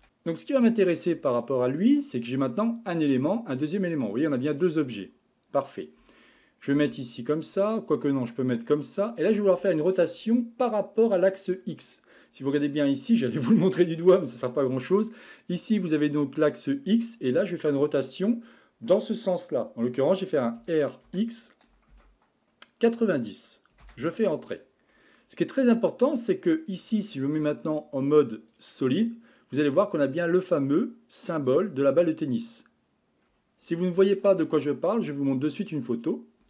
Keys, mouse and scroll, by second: 0.7-1.5 shift+middle drag, 1.5 click, 1.9 click, 3.3 click, 4.1 click, 6.8 KP_1, 7.8-10.9 middle drag, 20.6 r, 24.9-25.9 middle drag, 25.9 scroll up 2, 27.4 z, 29.0-32.0 scroll down 1.